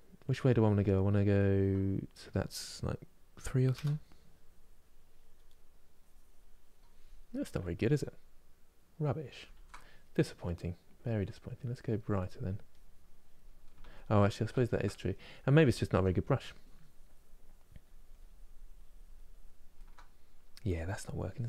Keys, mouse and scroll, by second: 4.0-5.2 drag, 5.2 middle click, 5.7-7.0 drag, 7.0-9.3 middle drag, 9.3 ctrl+z, 11.1 click, 11.9 middle click, 12.4-13.5 drag, 13.5 ctrl+z, 14.3 ctrl+z, 15.1-16.2 middle drag, 16.2-19.2 drag, 19.5-21.4 ctrl+middle drag.